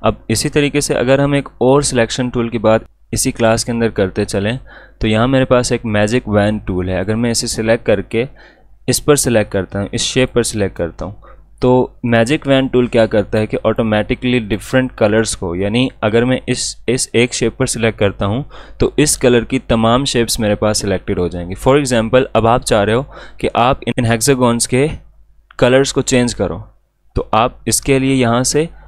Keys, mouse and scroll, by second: 0.0 space, 0.1 click, 0.7 alt+scroll up 1, 1.3 space, 1.5 click, 1.8 space, 6.9 click, 10.2 click, 10.2 click, 13.3 click.